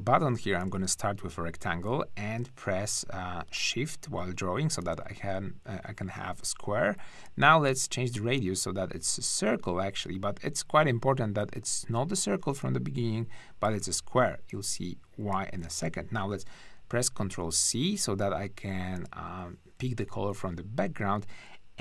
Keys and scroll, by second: 0.7 shift+r, 16.8 ctrl+c.